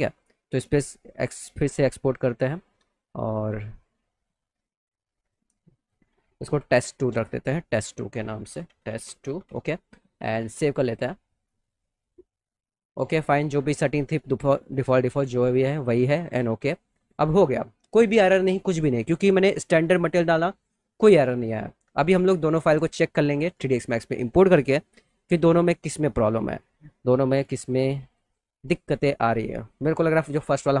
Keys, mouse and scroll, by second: 1.1 click, 4.2 click, 5.2 click, 5.7 click, 7.6 click, 8.1-9.4 typing, 10.8 click, 15.9 click, 22.8 click, 23.3 click, 24.4 click, 24.9 click, 30.7 click.